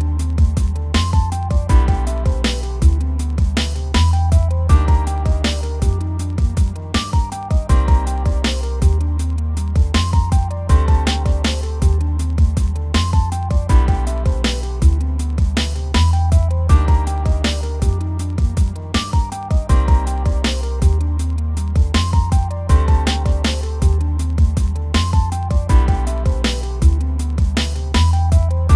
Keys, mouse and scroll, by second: 1.7 middle drag, 2.0 scroll up 1, 2.2 middle drag, 2.5 click, 2.9 scroll down 2, 3.1-3.7 middle drag, 3.7 scroll down 2, 3.8 shift+middle click, 3.9 scroll up 3, 4.1-5.3 middle drag, 5.6 alt+click, 6.1 KP_Decimal, 9.1 scroll down 1, 9.4 middle click, 10.3 scroll up 3, 11.0 middle click, 11.5 click, 12.1-13.2 middle drag, 13.2 r, 14.0 click, 14.5 scroll down 1, 14.8 alt+click, 15.1-16.3 shift+middle drag, 16.7 click, 16.9 scroll down 2, 17.3 shift+middle click, 17.6 scroll up 1, 18.1 middle click, 18.4 r, 19.5 r, 19.8 scroll down 1, 19.9 shift+middle click, 20.2 scroll up 1, 20.5 middle click, 21.5 alt+Left, 21.9 click, 22.1 scroll down 2, 22.2 middle drag, 22.4 Tab, 23.7 scroll up 1, 24.0 scroll down 1, 24.3 click, 24.3 scroll up 1, 24.5-25.1 middle drag, 25.1 click, 25.2 middle click, 25.4 Tab, 25.6-26.1 scroll up 2, 26.1 alt+click, 26.5 click, 26.9 scroll down 2, 27.0 Tab, 27.3 click, 27.7 middle click, 28.0 scroll up 1, 28.2-28.6 middle drag, 28.6 click.